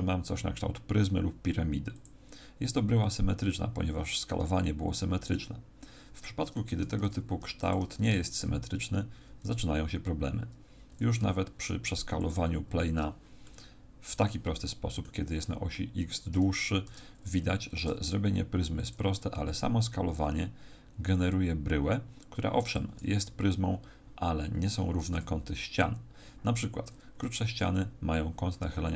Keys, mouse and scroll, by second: 2.0 click, 3.0 middle click, 6.8 Tab, 7.3 x, 8.2 shift+a, 10.9 s, 12.2 click, 13.4 middle click, 14.6 middle click, 15.3 middle click, 16.9 Tab, 17.9 e, 18.9 click, 19.5 s, 22.7 click, 25.1 KP_1.